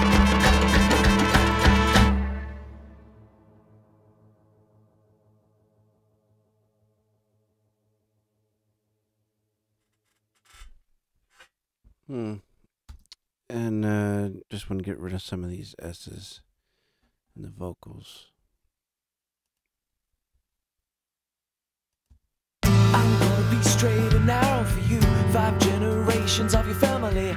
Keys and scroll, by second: 12.8 space, 14.8 super+=, 22.0 space.